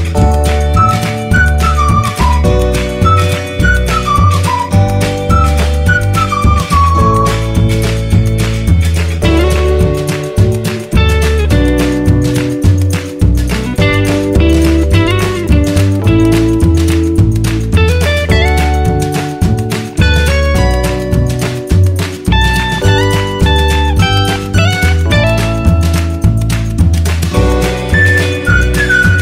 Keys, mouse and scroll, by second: 2.5 shift+y, 4.7 typing, 5.7 typing, 7.4-8.8 typing, 10.0 s, 11.8 click, 13.3 ctrl+t, 15.1-26.5 alt+drag, 26.5 Return, 27.6-29.2 drag.